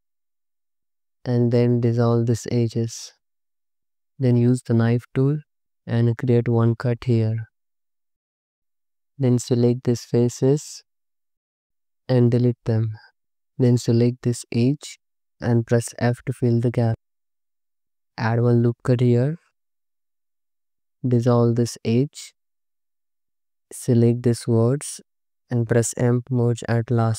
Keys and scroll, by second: 0.5 space, 0.9 c, 1.2 2, 2.7 ctrl+x, 3.8 1, 4.6 c, 5.0 y, 5.7 space, 6.7 y, 7.3 space, 12.1 x, 16.0 f, 18.7 ctrl+r, 22.2 ctrl+shift+x, 25.0 alt+z, 26.2 m.